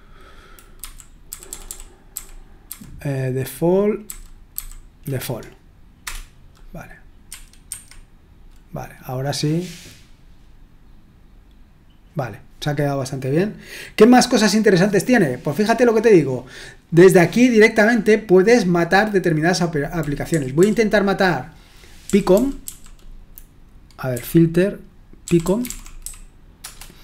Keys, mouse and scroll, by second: 1.3 Left, 1.4 Left, 1.6 Left, 2.1 Left, 4.0 Left, 4.5 Left, 6.0 Return, 7.3 Escape, 7.7 Escape, 20.6 Down, 22.3 Down, 22.6 Down, 24.1-26.5 typing, 26.6 Return.